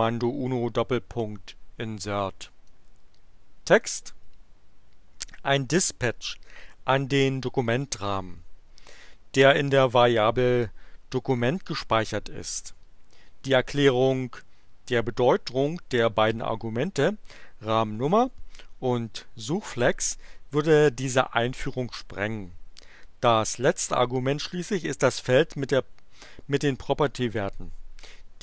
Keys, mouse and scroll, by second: 2.7-4.0 drag.